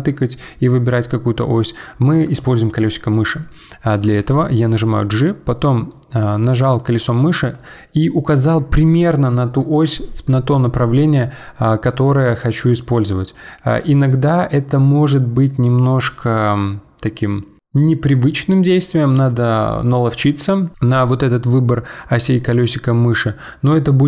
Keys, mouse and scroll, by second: 4.0 g.